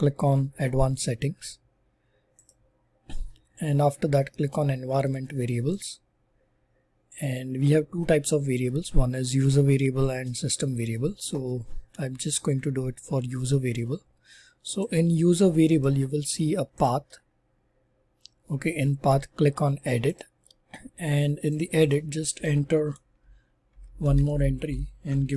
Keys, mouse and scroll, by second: 1.0 click.